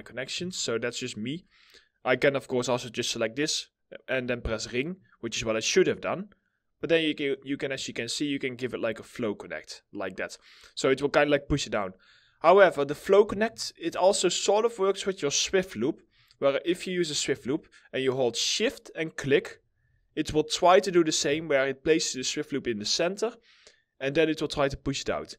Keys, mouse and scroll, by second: 0.0 ctrl+z, 0.3 alt+middle click, 7.0 middle click, 7.3 scroll down 1, 7.6 alt+middle click, 12.8 ctrl+z, 13.2 alt+middle click, 18.8 shift+click, 19.5 shift+click, 21.3 alt+middle click, 24.5 right click.